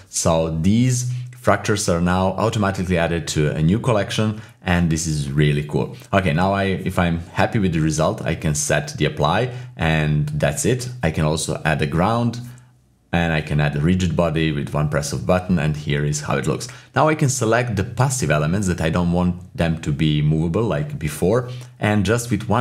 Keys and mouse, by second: 0.8-1.5 typing, 5.7-8.4 drag, 8.4 typing, 8.8 shift+middle click, 10.5-11.4 typing, 12.7-13.3 middle drag, 15.0-15.8 typing, 15.5 ctrl+z, 16.1 ctrl+z, 16.7 ctrl+z, 16.7-22.6 drag.